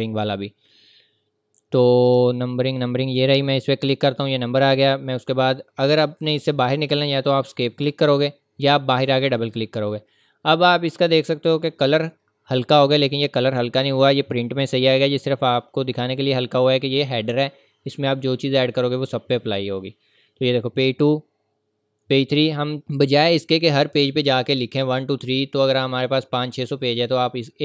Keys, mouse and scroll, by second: 1.3-3.5 scroll up 1, 3.5 click, 6.2 click, 7.4 Escape, 8.2-9.2 scroll up 1, 14.5 scroll up 1, 14.5-15.0 scroll down 1, 15.0-15.4 scroll up 1, 18.7 scroll up 1, 18.7 scroll down 1, 23.8 scroll up 1, 25.6 scroll up 1.